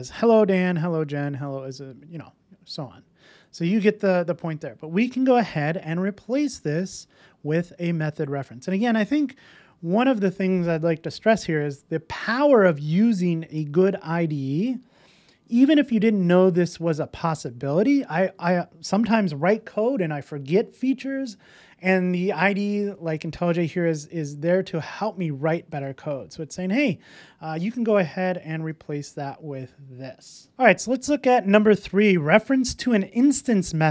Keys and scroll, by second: 5.9 alt+Return, 28.5 super+s, 30.5 super+v.